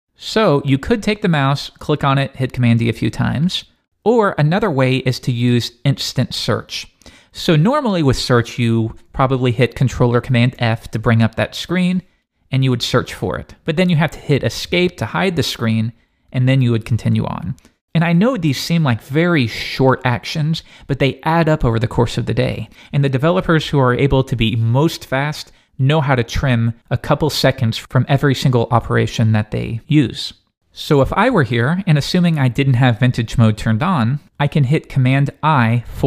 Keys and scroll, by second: 10.6 super+f.